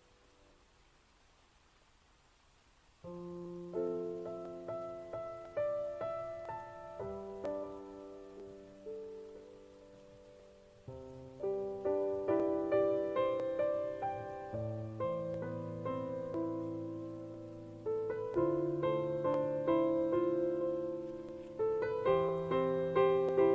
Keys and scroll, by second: 17.7 ctrl+z.